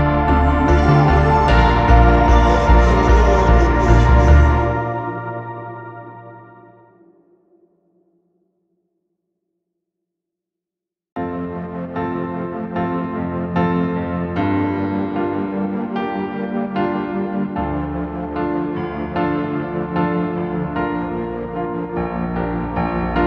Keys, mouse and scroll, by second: 0.3 middle click, 1.1 space, 1.7 middle click, 4.0 scroll down 1, 4.2 middle click, 4.5 right click, 6.4 middle click, 6.7-7.2 scroll up 1, 7.2 double click, 7.8 typing, 9.6 Return, 10.7 typing, 13.5 Return, 14.2 scroll down 1, 14.4 middle click, 14.7 scroll up 1, 15.0 middle click, 16.2 typing, 20.5 double click, 20.8 right click, 21.5 double click.